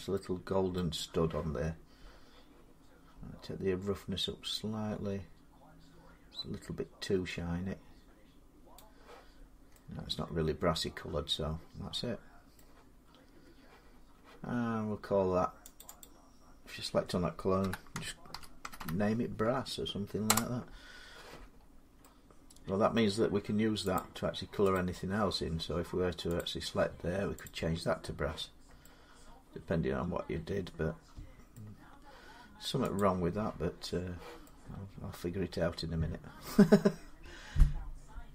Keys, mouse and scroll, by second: 0.6 middle click, 5.6 middle click, 8.6 click, 9.2-9.6 scroll down 4, 9.4 scroll up 1, 12.4 middle click, 15.6 click, 15.8 click, 17.5-18.6 typing, 20.1 Return, 21.4 scroll up 3, 22.8 middle click, 23.8 click, 23.8 scroll, 24.6 click, 26.2 click, 27.3 click, 28.3 scroll down 2, 29.5 scroll up 2, 30.9 scroll down 2, 31.3 middle click, 32.8 click, 33.0 middle click.